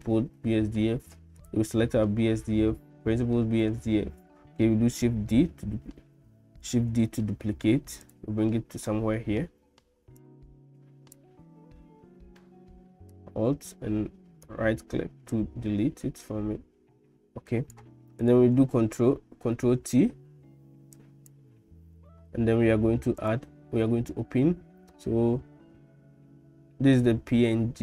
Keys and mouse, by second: 1.4 click, 5.1 ctrl+d, 6.8 shift+d, 8.9 middle click, 10.2-11.2 drag, 13.3-14.5 ctrl+drag, 15.3-17.8 drag, 19.6 ctrl+t, 21.0 click.